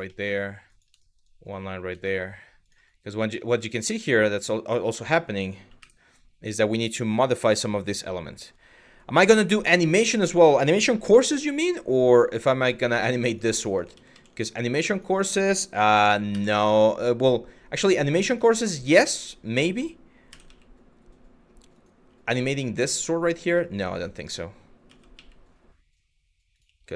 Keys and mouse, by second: 0.3 click, 0.7 shift+middle click, 1.6 shift+middle click, 2.2 click, 3.0 shift+middle click, 3.4 q, 3.9 click, 4.5 1, 5.4 w, 9.4 click, 10.7 g, 12.5 click, 13.5 ctrl+z, 13.7 ctrl+z, 14.1 click, 15.9 s, 16.2 x, 17.5 click, 18.7 click, 19.9 s, 20.1 x, 21.3 click, 22.8 click, 23.4 click, 24.5 s, 24.8 x, 26.1 click.